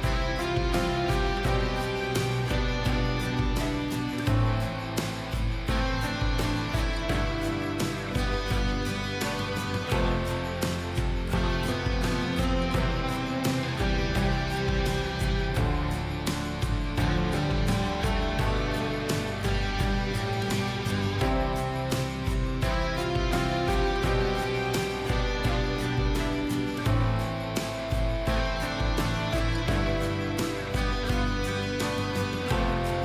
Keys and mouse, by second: 0.2 click, 1.9 click, 3.1 click, 4.3 click, 5.0 click, 6.3 click, 8.2 click, 10.4 click, 11.4 click, 12.1 click, 13.4 click, 20.7 click, 23.4-25.7 drag, 27.1 click, 27.7 shift+d, 27.9-29.1 drag, 29.3-30.3 drag, 30.6 click, 31.1 click, 31.5 click.